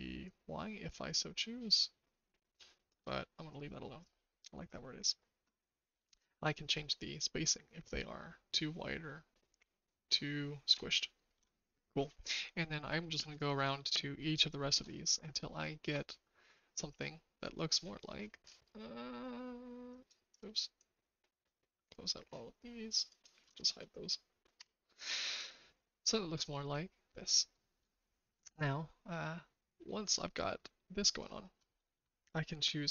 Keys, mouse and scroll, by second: 0.3-2.8 shift+drag, 3.4-4.9 drag, 6.7-10.7 shift+drag, 14.2 shift+click, 15.5 shift+click, 16.4 middle click, 19.9 click, 20.2 click, 20.7-22.0 drag, 23.2 click, 24.5 h, 26.6 click, 27.6 h, 27.9 shift+middle click, 30.2 middle click, 31.1 click.